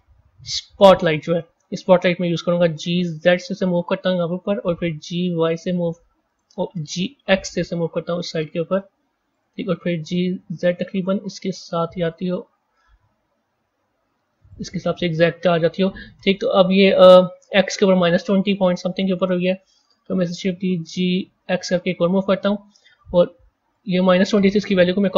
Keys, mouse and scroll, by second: 2.5 g, 4.9 g, 6.9 g, 9.9 g, 12.6 g, 16.2 click, 20.3 shift+d, 23.6 click, 25.0-25.1 drag.